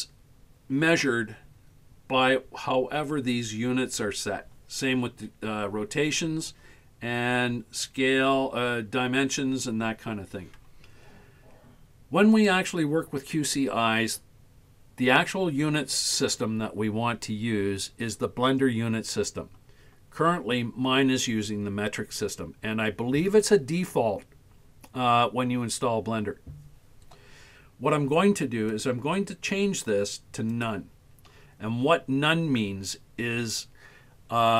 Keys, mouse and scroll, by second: 12.4 click, 28.7-30.7 drag.